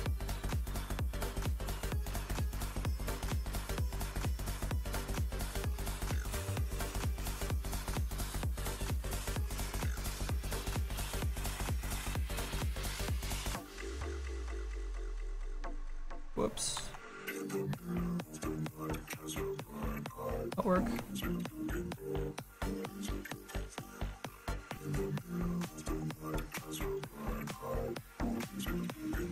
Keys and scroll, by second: 8.9 s, 16.8 ctrl+z.